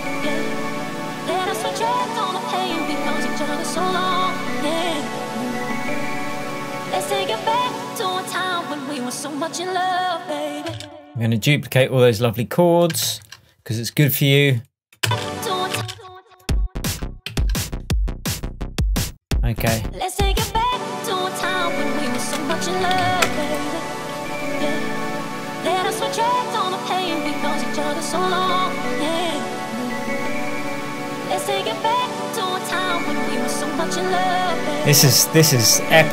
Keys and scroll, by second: 10.7 space, 13.1 super+d, 15.1 space, 17.3 super+s.